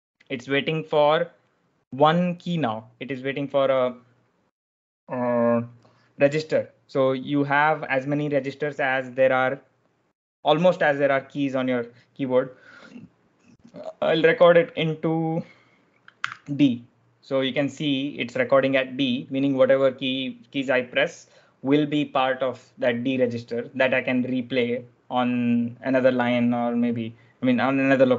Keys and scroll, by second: 16.1 d.